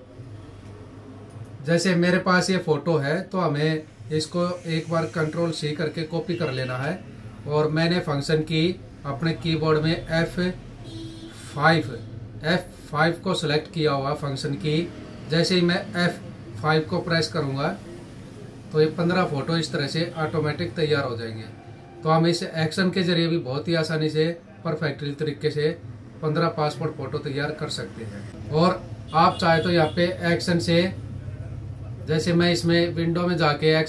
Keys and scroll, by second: 6.0 ctrl+c, 17.7 F5.